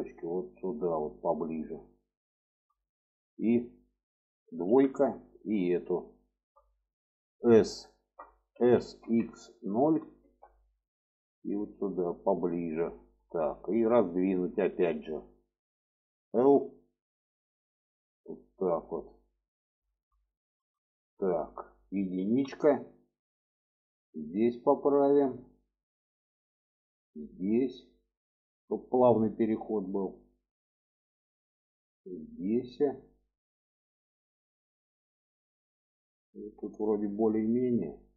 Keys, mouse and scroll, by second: 0.0-1.9 drag, 2.2 shift+middle click, 4.5 2, 5.8 alt+shift+click, 8.3 s, 11.0-12.4 drag, 13.4 shift+middle click, 16.2 l, 17.2 click, 19.1 click, 20.1 shift+middle click, 21.1 shift+middle click, 22.1 1, 23.6 click, 25.4 click, 26.6-28.1 drag, 28.6 click, 29.2-30.4 drag, 32.1 click, 33.3 click, 33.7 click, 36.6-38.1 drag.